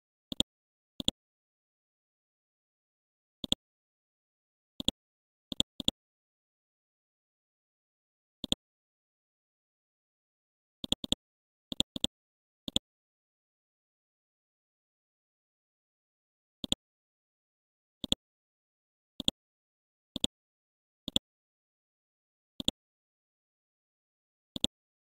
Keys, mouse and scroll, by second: 0.3 click, 1.2-2.2 typing, 3.4 click, 4.8 shift+click, 7.4 Down, 8.0-8.4 scroll down 1, 8.4 click, 9.0-10.8 scroll down 1, 10.8-13.9 drag, 13.9-14.3 scroll up 1, 15.1 Home, 16.6 click, 17.3 scroll up 1, 18.0 click, 19.2 shift+click, 20.2-22.1 drag, 23.3 BackSpace, 24.5 click.